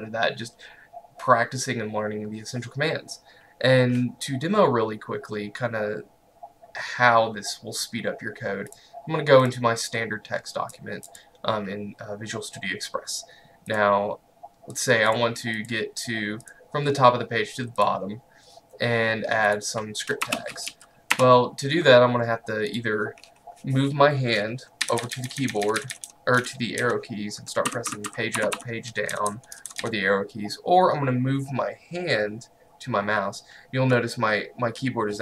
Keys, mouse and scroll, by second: 8.8 click.